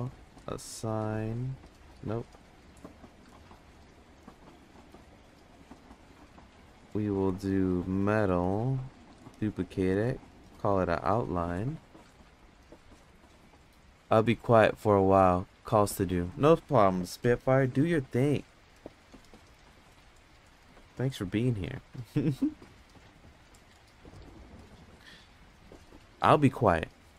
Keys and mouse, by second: 1.8 ctrl+z, 6.3-8.4 drag, 9.9 click, 10.0-23.9 drag, 17.3 BackSpace, 24.4 click, 26.8 ctrl+c.